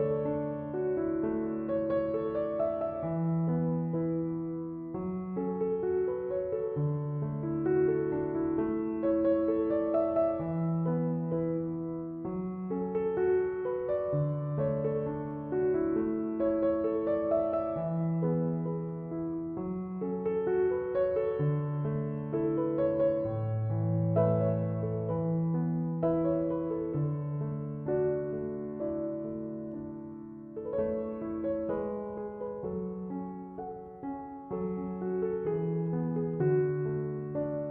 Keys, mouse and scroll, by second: 2.0-3.0 scroll up 2, 3.0 Tab, 5.0 click, 6.8 i, 10.3 x, 12.6-14.1 middle drag, 14.1 Tab, 15.2 KP_Decimal, 16.4-16.8 scroll down 1, 16.8-17.7 middle drag, 17.7 Tab, 18.8-19.6 middle drag, 19.6 a, 19.9-21.1 middle drag, 21.1 e, 24.8-26.3 middle drag, 26.3 Tab, 26.6-27.5 middle drag, 27.5 ctrl+a, 30.0-30.3 scroll down 1, 30.3-32.0 shift+middle drag, 32.0-35.0 drag, 36.6-37.7 drag.